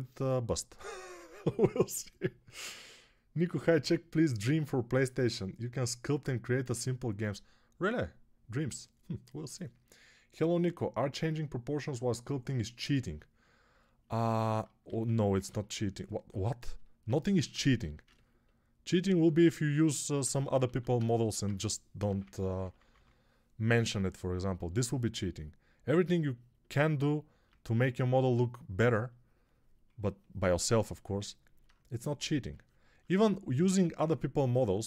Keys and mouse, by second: 14.7 alt+q, 20.6 alt+q, 21.3 alt+1, 21.9-22.8 typing.